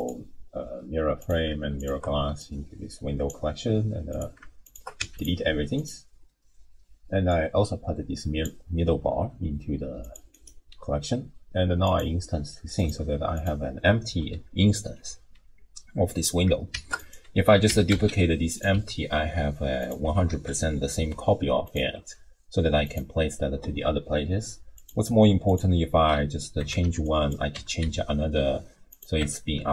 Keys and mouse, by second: 1.8 shift+click, 2.4 drag, 4.1 click, 4.6 shift+click, 5.0 x, 5.8 click, 7.3-8.1 drag, 10.0 click, 10.3-12.0 drag, 12.8 click, 16.8 shift+d, 17.7 r, 18.7 g, 20.0 r, 22.0 g, 24.8 click, 25.5 click, 26.6 Tab, 26.8 1, 27.2 click, 27.6 g, 29.2 Tab.